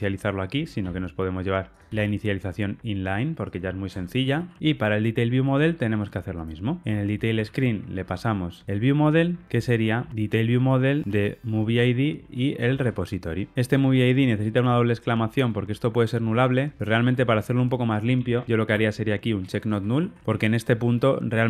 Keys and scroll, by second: 0.8 super+x, 1.9 super+v, 4.6 super+BackSpace, 4.6 ctrl+y, 11.0 super+x, 18.7 Return, 19.3 Delete.